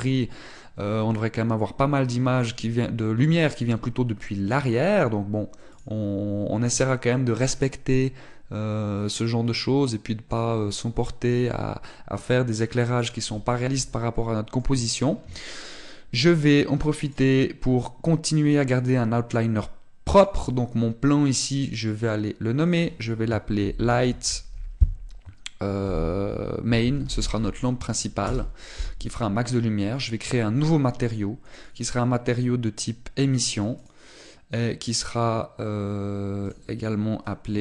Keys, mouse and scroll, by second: 7.5 middle click, 14.2 middle click, 17.9 click, 21.0 click, 32.5 click, 37.3 click.